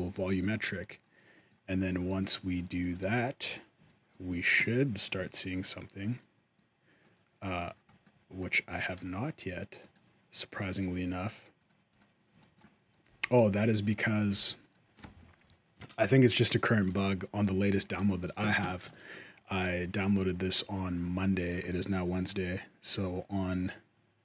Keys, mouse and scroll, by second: 0.8 middle click, 1.9 shift+middle click, 2.6 click, 2.8 g, 3.6 shift+middle click, 5.1 shift+middle click, 6.0 middle click, 6.8 middle click, 6.8-7.1 scroll up 1, 7.4-8.1 scroll down 11, 8.1-9.0 scroll up 9, 8.7 z, 10.4 shift+middle click, 11.4 click, 11.7 click, 12.2 shift+middle click, 12.7 click, 12.8 g, 13.7 shift+middle click, 14.1 g, 17.4 middle click, 18.7 shift+middle click.